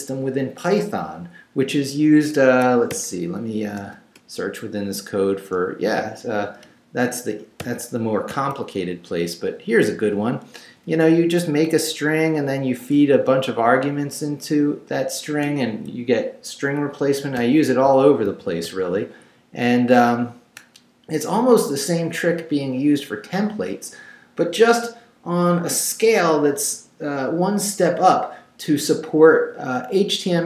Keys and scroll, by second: 2.5 Escape, 2.9-4.3 typing, 6.6 Return, 7.6 n, 9.8 Right, 10.5 Left, 11.4 Right, 12.9 Right, 15.9 Left, 17.4 n.